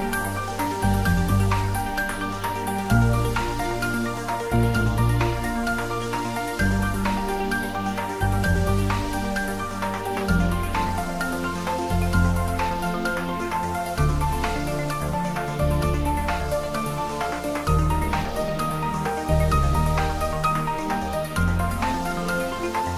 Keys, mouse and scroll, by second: 0.0 click, 0.5 h, 2.2 ctrl+z, 3.4 click, 6.9 click, 11.0 r, 15.2 click, 15.9-17.2 typing, 20.0 click.